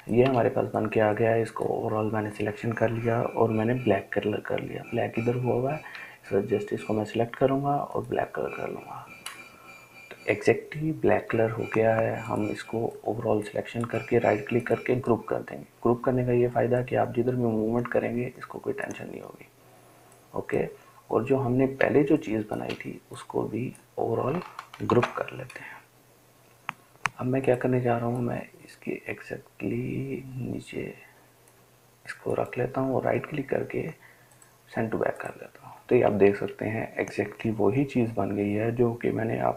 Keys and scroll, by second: 6.2 i, 25.2 ctrl+g.